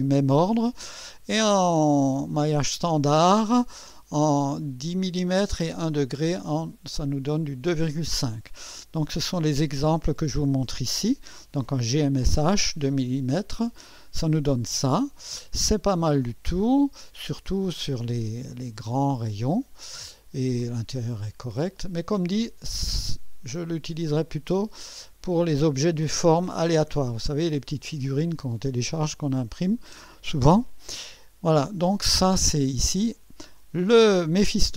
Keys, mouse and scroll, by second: 9.8 click, 16.7 scroll up 1, 17.9-20.5 drag, 21.5 click, 23.4 scroll up 1, 25.0 scroll down 1, 26.2-27.7 drag, 34.4 click.